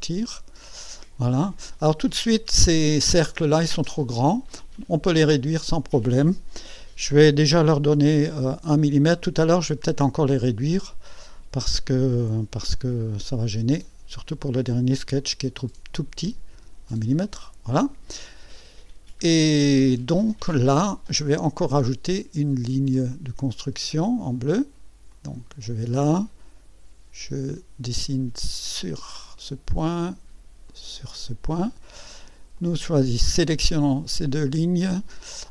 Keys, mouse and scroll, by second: 0.3 scroll up 1, 1.8 right click, 4.1 right click, 5.3 click, 12.5 click, 15.2 click, 16.5 KP_1, 16.8 click, 18.0 scroll up 2, 18.8-19.2 scroll down 2, 19.5 right click, 22.9 click, 25.1 click, 28.5 click, 30.7 click, 31.5 right click, 32.5 click, 34.3 click.